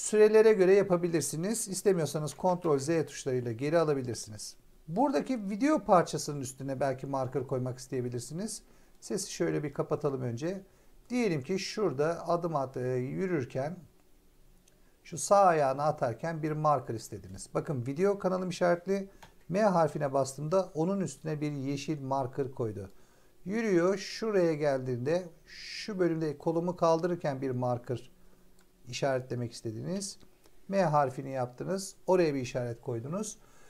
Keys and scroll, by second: 2.0 ctrl+z, 19.1 m, 29.8 m.